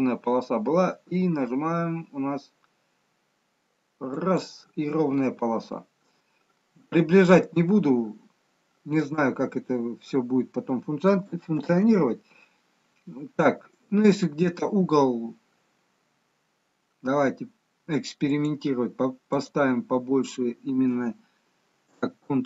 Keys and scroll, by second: 11.5 ctrl+z, 22.2 ctrl+z.